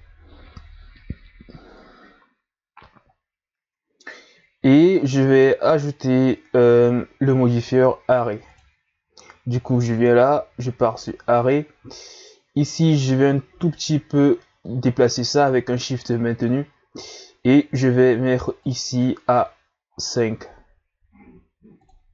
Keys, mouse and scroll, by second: 4.6 scroll down 2, 5.8 shift+scroll up 1, 6.5-7.0 ctrl+scroll up 2, 7.6-11.5 drag, 13.0-16.0 shift+drag, 18.7-19.9 drag, 19.9-21.7 scroll down 2, 21.7 scroll down 1, 21.7-22.1 drag.